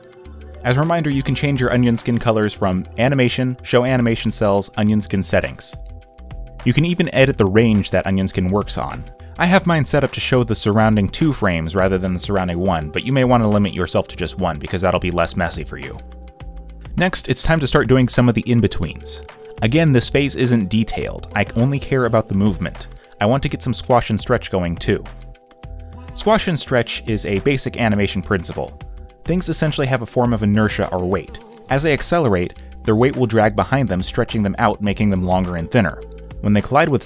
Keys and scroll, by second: 2.5 ctrl+z, 4.6 ctrl+z, 5.1 ctrl+z, 9.1 ctrl+z, 13.2 ctrl+z.